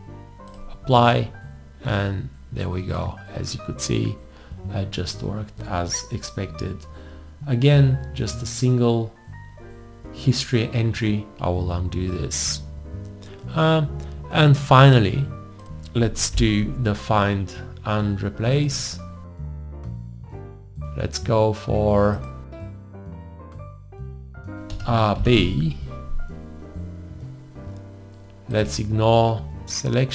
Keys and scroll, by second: 11.3 ctrl+z, 16.4 alt+l, 24.7 shift+r, 25.2 shift+b.